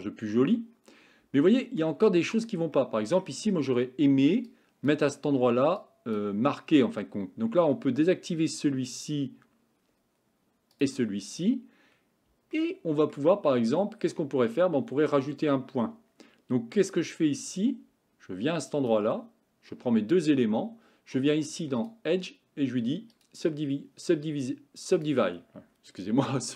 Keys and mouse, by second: 1.4 shift+middle click, 2.8 shift+middle click, 4.5 click, 5.8 click, 8.9 click, 10.8 click, 12.6 shift+middle click, 17.8 click, 21.9 click, 24.6 click.